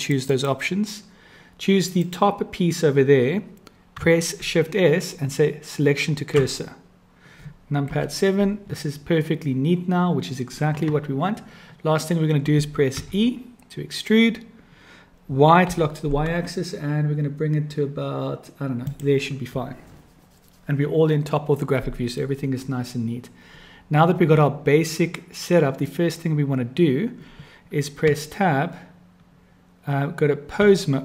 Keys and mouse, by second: 0.0 click, 4.4 shift+s, 7.9 KP_7, 13.0 e, 28.1 Tab.